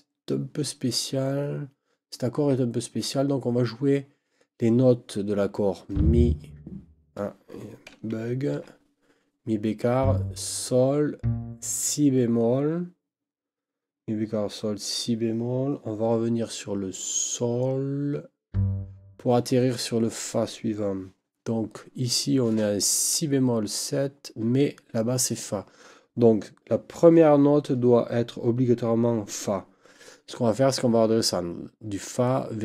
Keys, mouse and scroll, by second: 8.5 ctrl+z.